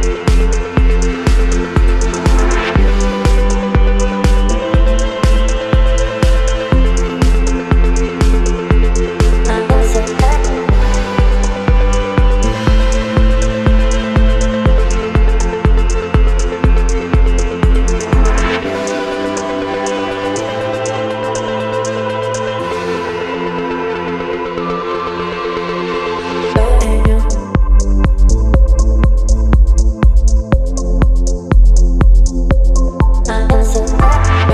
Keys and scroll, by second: 20.4 Return, 28.8 ctrl+t, 33.2 Return.